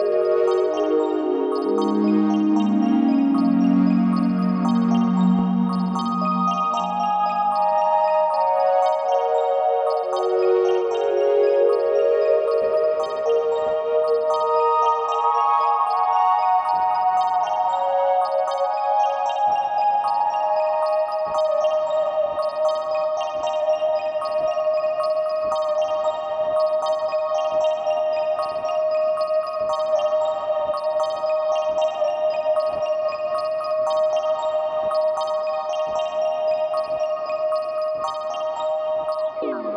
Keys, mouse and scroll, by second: 0.5 g, 2.7 click, 2.9-3.4 scroll down 1, 3.9-13.8 middle drag, 5.1 KP_1, 5.9-6.4 scroll up 1, 7.1-7.7 scroll down 1, 8.6-11.5 scroll up 1, 11.5 KP_0, 13.8 s, 16.3 click, 16.4 scroll down 1, 17.4 s, 20.6 click, 28.7-31.4 drag, 32.0 click, 32.9 Delete.